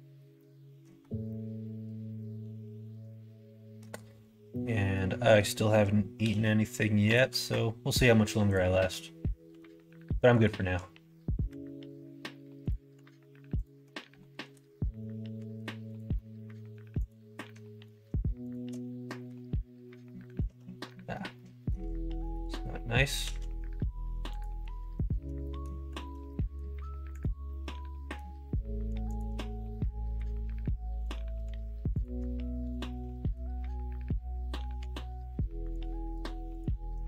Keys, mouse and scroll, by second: 0.3 middle click, 1.3-3.8 middle drag, 4.4 middle click, 6.1 k, 11.4 k, 14.6 middle click, 15.3 2, 15.8 click, 16.1 middle click, 17.0 click, 17.4 middle click, 18.4 shift+click, 19.2 f, 20.0 middle click, 20.4 ctrl+z, 20.8 middle click, 21.3 middle click, 23.2 s, 25.4 middle click, 25.9 ctrl+z, 26.2 middle click, 27.1 click, 27.4 middle click, 29.1 click, 30.1 k, 33.0 middle click, 34.7 2, 35.7 click, 36.5 click.